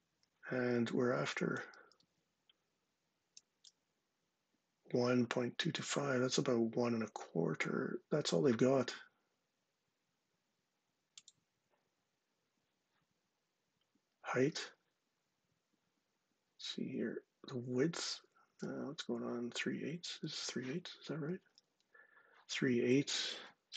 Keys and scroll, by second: 1.8 super+Tab, 20.1 super+Tab, 21.4 super+Tab.